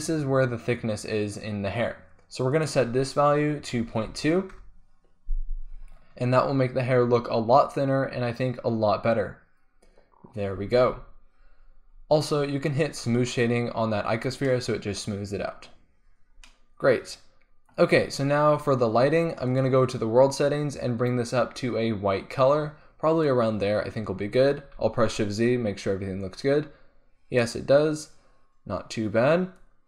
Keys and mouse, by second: 10.7 z, 10.8 z, 13.3 click, 14.6-15.2 middle drag, 19.4-24.9 drag, 24.9 shift+z.